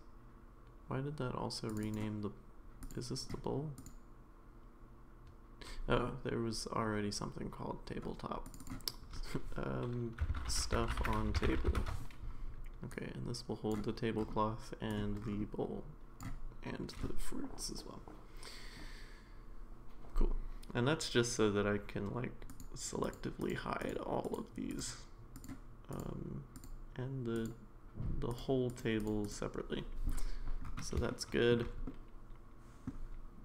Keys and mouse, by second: 1.8-2.9 drag, 3.8 click, 8.4 click, 8.6-12.2 drag, 12.2 f, 12.9-13.7 drag, 15.0-16.2 drag, 22.5 click, 23.0 click, 23.4 click, 23.8 click, 24.7 click, 25.4 click, 25.9-26.6 drag, 27.4 click, 28.3 click, 28.7 click, 29.0 click, 29.2 click, 31.1-31.5 shift+middle drag, 31.9-32.9 middle drag.